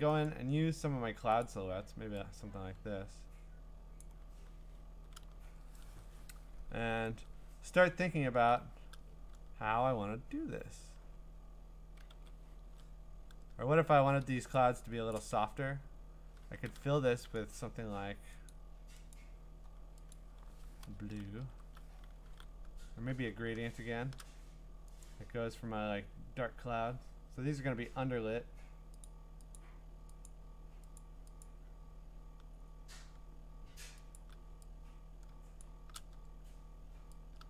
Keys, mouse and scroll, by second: 0.2 click, 0.9-1.4 scroll, 1.4 click, 4.0 click, 7.8-10.9 scroll, 12.1 ctrl+z, 14.8 middle click, 15.2 click, 18.5 click, 19.1 click, 20.1 click, 21.4 alt+BackSpace, 22.2-23.6 typing, 25.0 click, 25.7-26.9 scroll, 26.9 scroll down 1, 26.9-27.3 scroll down 4, 27.6 scroll up 2, 27.7 scroll down 4, 27.9 scroll up 1, 28.0-29.1 scroll down 3, 29.1 click, 29.6 click, 29.8-30.3 scroll down 5, 30.3 click, 31.0 click, 31.4 click, 31.8-32.4 scroll down 7, 32.5-32.9 scroll up 3, 32.9 scroll down 1, 33.0-34.2 scroll, 34.2 click, 35.6 shift+click.